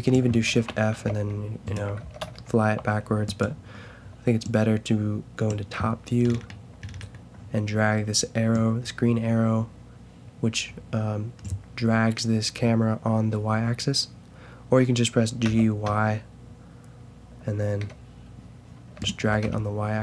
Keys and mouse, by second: 0.4 shift+f, 2.0 shift+f, 6.2-8.5 middle drag, 8.5-11.4 drag, 15.4 g, 19.2 g.